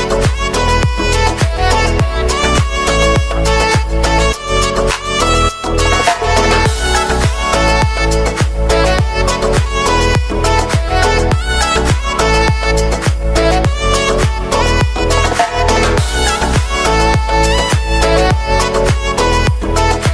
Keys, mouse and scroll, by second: 1.1 KP_0, 3.2 KP_Enter, 4.3-5.3 scroll up 1, 5.3-6.1 scroll down 1, 6.1-6.7 drag, 6.7-7.5 scroll down 2, 7.5 click, 8.0-8.8 scroll down 2, 8.8-10.2 drag, 10.2 KP_Enter, 12.1-13.1 drag, 13.1 KP_Enter, 14.3-15.8 drag, 15.8 KP_Enter, 16.4 click, 16.7 KP_1, 16.8 KP_2, 16.8 KP_Enter, 18.7 alt+a, 19.0 ctrl+s, 19.2-19.7 middle drag, 19.7 space.